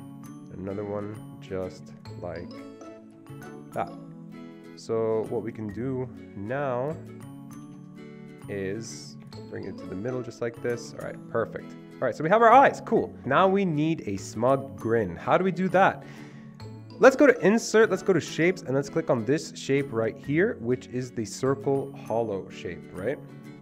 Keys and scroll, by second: 7.7 ctrl+g, 9.3 ctrl+Right, 9.5 ctrl+Right, 10.8 Escape, 10.9 Escape, 13.2 Delete.